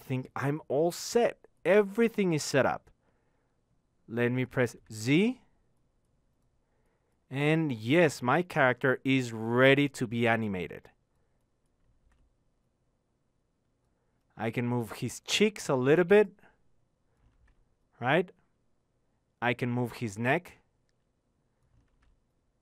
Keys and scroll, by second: 10.8 z.